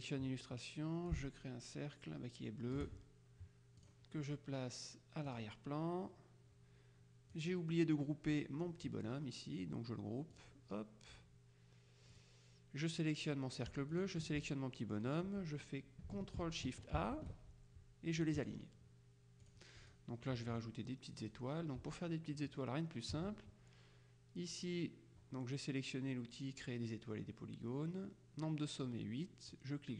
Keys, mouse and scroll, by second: 1.2-3.3 ctrl+shift+drag, 3.8 click, 5.3 click, 7.4-9.0 drag, 10.4 click, 12.2 click, 14.0 shift+click, 17.1 ctrl+shift+a, 18.5 click, 19.6-20.5 drag, 21.3 click, 22.4 click, 29.6 click.